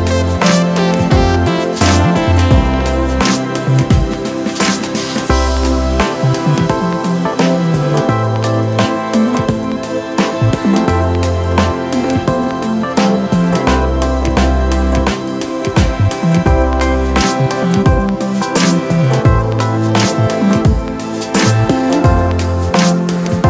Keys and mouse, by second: 0.0-4.6 drag, 4.6-6.7 drag, 6.7-9.7 drag, 9.7-13.4 drag, 13.4-19.7 drag, 19.9-23.4 drag.